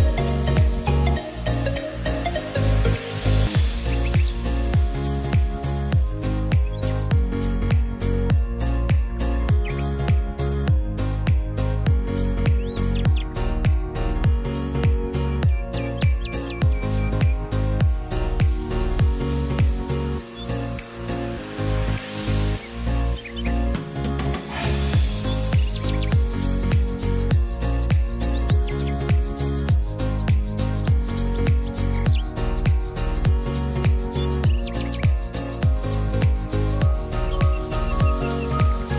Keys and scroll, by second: 3.1 e, 5.0 t, 30.3 2, 30.7 5, 31.0 Return.